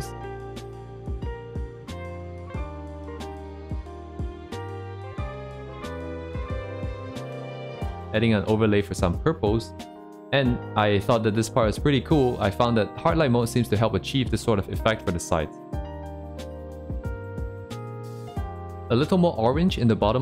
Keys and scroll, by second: 0.0 ctrl+z, 0.7 c, 0.9 ctrl+z, 1.7 ctrl+z, 2.5 ctrl+z, 3.1 ctrl+z, 3.5 c, 3.8 ctrl+z, 3.9 c, 5.0 ctrl+z, 5.8 ctrl+z, 6.4 ctrl+z, 6.9 ctrl+z, 8.4 ctrl+z, 11.0 ctrl+z, 18.2 ctrl+z.